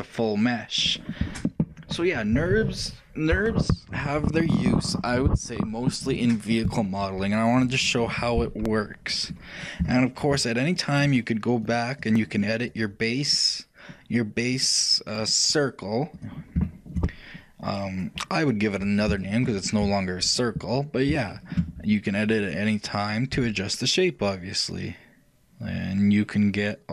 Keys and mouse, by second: 9.4-11.7 middle drag, 11.7-17.1 shift+drag, 13.1 right click, 17.1-21.2 shift+middle drag, 21.2-26.9 shift+right drag, 23.4 shift+g.